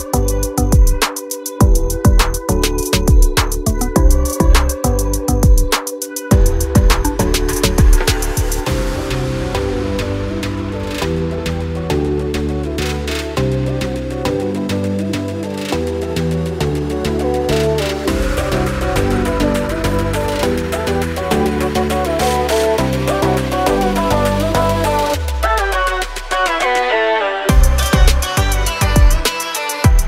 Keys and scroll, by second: 6.9 r, 10.8 space, 11.6 Delete, 13.2 m, 13.6 Up, 14.4 space, 16.1 m, 16.6 Up, 17.1 2, 17.4 Return, 17.7 space, 18.0 f, 19.1-21.4 typing, 19.4 Return, 21.2 Return, 23.9 r, 26.7 space, 27.5 Delete, 29.5 m.